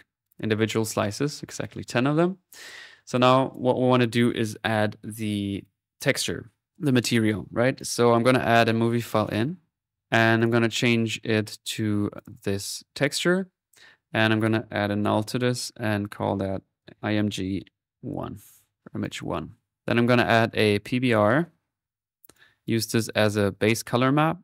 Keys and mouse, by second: 1.4-1.7 typing, 5.7 click, 7.8 click, 8.0-9.1 typing, 9.3 click, 10.4 click, 12.8-15.0 drag, 15.0 alt+n, 15.9 alt+click, 18.7 middle click, 19.0 click, 20.1-21.8 drag, 21.8 middle click, 22.3 click.